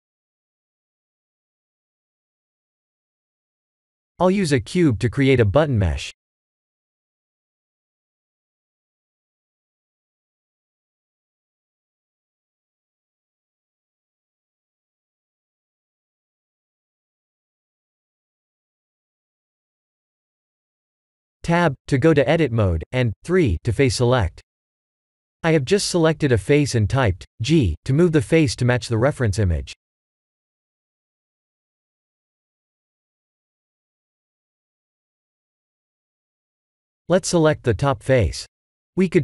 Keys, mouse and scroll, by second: 0.5 click, 2.4-3.6 scroll up 2, 3.6 scroll up 1, 3.7 click, 4.2 shift+middle click, 4.9 click, 5.4 shift+a, 10.6 s, 11.8 g, 17.5 Tab, 18.2 shift+z, 18.4-18.8 scroll up 3, 18.8 shift+middle click, 19.5 3, 20.2 click, 20.9 g, 24.2 click, 25.3 g, 30.2 Tab, 30.7 middle click, 35.0 KP_1, 35.4 KP_7, 36.6 Tab, 37.1 3, 37.5 click, 38.3 middle click.